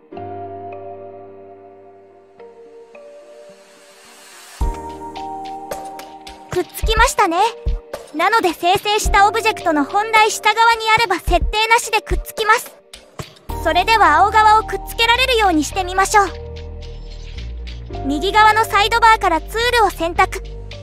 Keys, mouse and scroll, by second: 0.6 r, 3.1 shift+click, 4.3-7.4 right drag, 14.0 ctrl+z, 16.6 ctrl+z, 17.0 ctrl+z, 20.0 click.